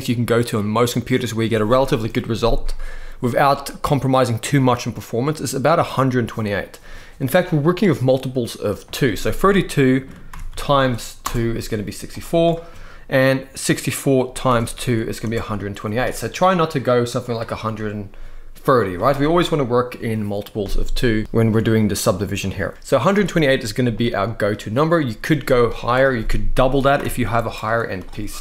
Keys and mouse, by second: 7.6-11.0 drag, 11.8-15.0 drag, 17.0 click, 19.2 click, 25.5-27.2 drag.